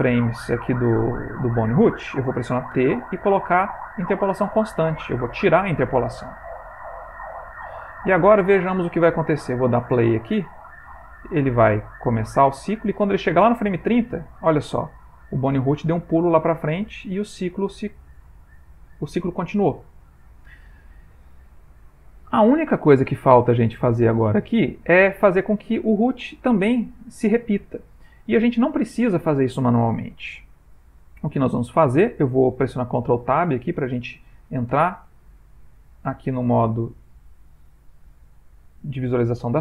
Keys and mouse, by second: 7.3 click, 9.9 space, 21.5 Escape, 22.2 ctrl+middle click, 23.6 middle click, 24.0 ctrl+middle click, 24.3 ctrl+middle click, 33.5 middle click, 34.8 ctrl+Tab, 35.6 middle click, 36.1 ctrl+middle click, 37.4 middle click, 38.2 a, 38.7 middle click, 39.3 ctrl+middle click.